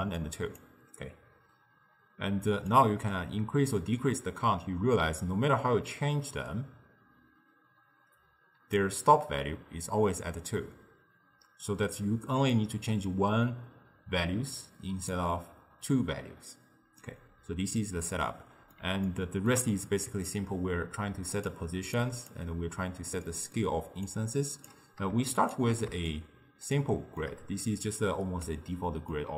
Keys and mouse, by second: 0.0-0.7 typing, 0.2-0.6 drag, 2.8-5.8 drag, 12.6-15.6 drag, 17.1-20.3 middle drag, 20.3 click, 22.0 click, 23.3-24.1 middle drag, 24.1 click, 25.4 alt+shift+click, 26.2-29.3 shift+middle drag.